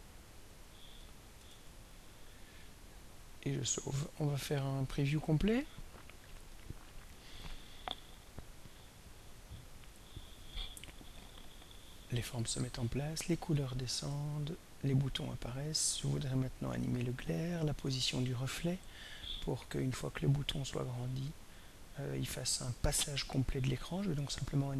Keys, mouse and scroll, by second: 1.4 ctrl+s, 4.3 click, 6.0 click, 15.5 click, 18.4-21.4 drag, 22.2 click.